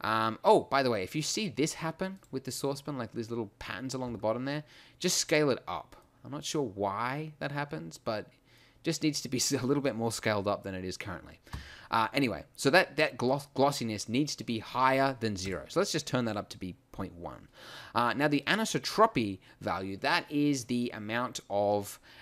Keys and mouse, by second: 2.1-4.0 drag, 4.0 s, 5.5-6.0 drag, 11.5 KP_1, 15.4-17.1 drag, 21.7 middle click.